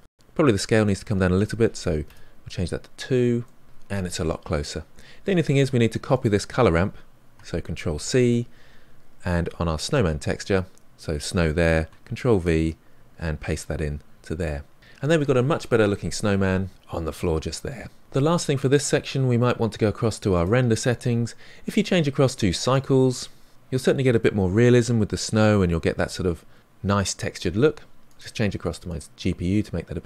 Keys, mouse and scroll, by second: 2.0-3.4 drag, 3.4-6.2 middle drag, 6.2-8.7 drag, 12.0 ctrl+v, 13.5-15.3 drag, 15.3-17.5 middle drag, 18.1 click, 22.9 click, 29.1-30.0 drag.